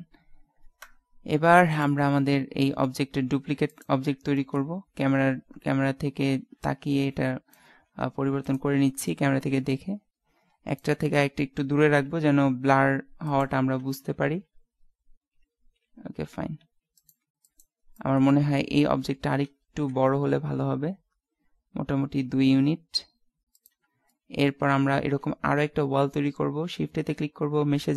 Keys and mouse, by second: 0.8 KP_0, 1.9 right click, 2.2 middle click, 3.4 shift+d, 5.4 KP_0, 8.3 shift+d, 9.2-10.8 drag, 12.3 shift+d, 13.7 ctrl+z, 14.2 shift+f, 17.6-18.6 right drag, 18.9 KP_7, 19.8 s, 24.3 middle click, 25.0 shift+a.